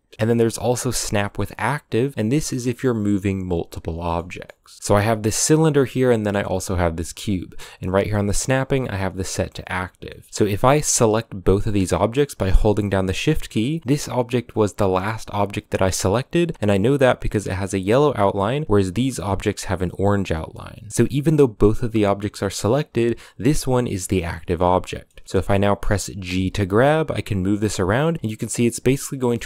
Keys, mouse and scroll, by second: 3.6 scroll down 1, 3.8-4.6 shift+middle drag, 4.6 scroll down 3, 4.8 middle click, 5.2 right click, 6.4-9.9 right drag, 9.9-10.3 middle drag, 10.3 right click, 11.2 shift+right click, 12.4 shift+right click, 13.2 scroll up 2, 21.1 g, 24.3-24.6 scroll down 1, 24.6 middle drag, 24.9 scroll down 2, 25.1-26.1 shift+middle drag, 26.1 g.